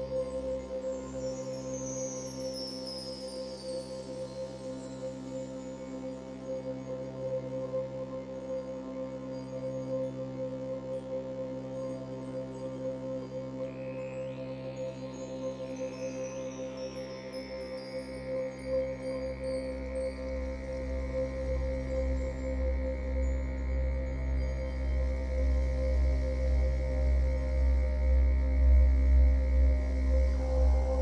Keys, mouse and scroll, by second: 4.3 scroll down 2, 4.5-6.1 shift+middle drag, 5.0 scroll up 1, 6.1-10.2 shift+drag, 10.2-12.6 middle drag, 11.5 scroll up 2, 12.6-14.9 shift+drag, 14.9 middle click, 15.8-18.6 shift+drag, 18.4 scroll down 1, 18.6-20.5 middle drag, 18.9 scroll down 1, 19.4 scroll up 1, 20.5-31.0 drag, 23.4-23.8 scroll up 1, 29.6 scroll up 1.